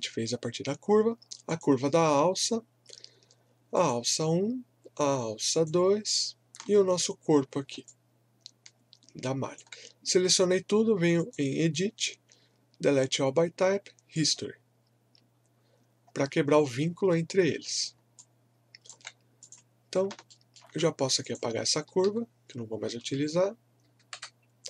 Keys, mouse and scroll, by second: 1.5 shift+click, 7.8-11.2 alt+drag, 14.1 click, 16.0 scroll down 1, 17.7 scroll up 1, 18.1 alt+click, 20.3 alt+middle click, 21.2 click, 22.0 w, 24.1 Delete.